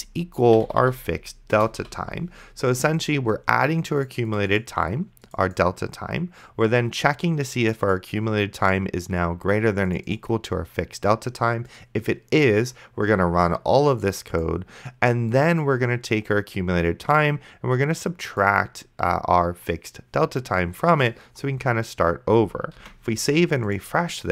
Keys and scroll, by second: 0.0-1.8 typing, 1.6 Return, 23.0 ctrl+s.